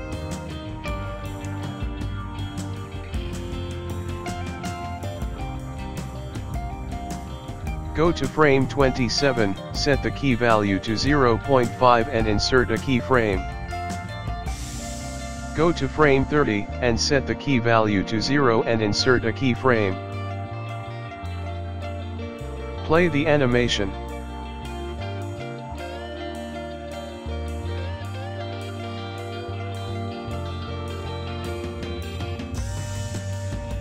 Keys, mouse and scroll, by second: 0.7 click, 6.8 click, 8.2 click, 9.2 click, 12.2 click, 12.5 i, 14.0 click, 22.0 click, 22.9 click, 24.2 click, 24.2 i, 24.9 click, 25.3 space, 26.7 space, 27.3 click, 28.3 click, 30.7 space, 31.6 click.